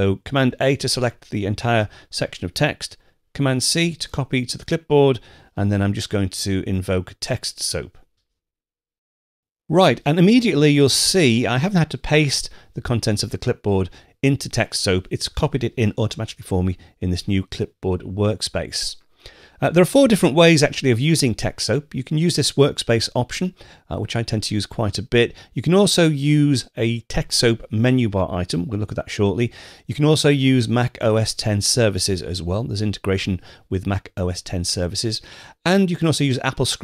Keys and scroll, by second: 0.3 super+a, 3.3 super+c.